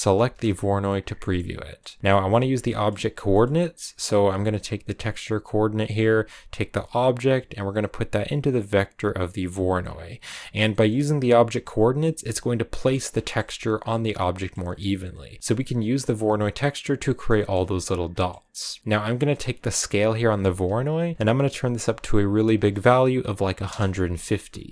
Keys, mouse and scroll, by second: 0.0 ctrl+shift+click, 2.1 scroll down 1, 2.5 shift+middle click, 3.0 scroll down 1, 3.3-4.3 middle drag, 4.3-9.2 drag, 9.8 scroll up 3, 11.2-12.6 drag, 12.6 middle click, 13.2-15.4 shift+scroll up 2, 15.4-16.4 middle drag, 16.4-17.2 scroll down 1, 17.2-23.5 shift+middle drag, 24.6 middle click.